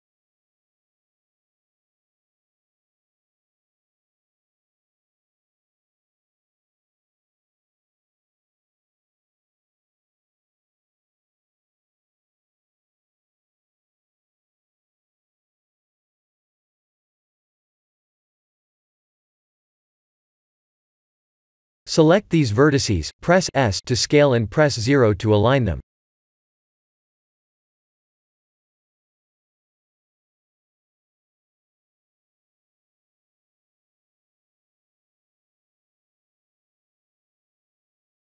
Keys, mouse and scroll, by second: 0.2-1.0 scroll down 7, 2.2 middle click, 3.6 KP_1, 3.9 KP_7, 5.4 KP_3, 6.5 shift+d, 9.8 middle click, 10.5-10.8 scroll up 7, 11.3 shift+middle click, 12.2 middle click, 15.0 click, 21.1 Tab, 21.7 click, 22.4 Tab, 23.2 1, 24.5 b, 30.4 click, 32.6 KP_3, 33.8 middle click, 34.9-35.6 scroll down 8, 35.5 middle click, 37.9 click.